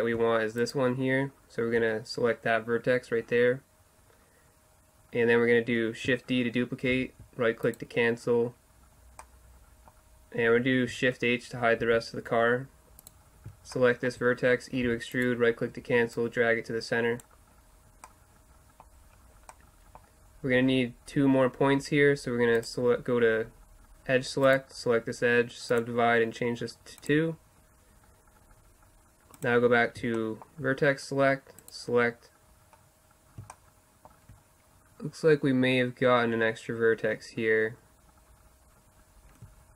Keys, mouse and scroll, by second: 0.6-3.0 right drag, 3.0-7.0 middle drag, 7.0 shift+d, 8.4 middle click, 11.9 shift+h, 14.9 e, 17.8 click, 18.0-22.6 middle drag, 22.6-24.5 drag, 24.5-26.2 right drag, 25.7-28.7 drag, 29.4 click, 30.2-31.5 middle drag, 31.0 click, 31.7-33.5 right drag, 33.5 middle click.